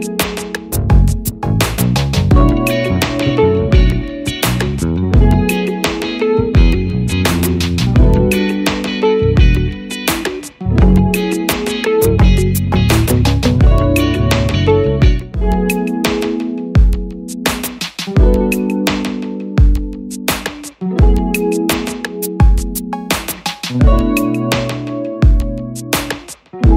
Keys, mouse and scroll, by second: 4.4 double click.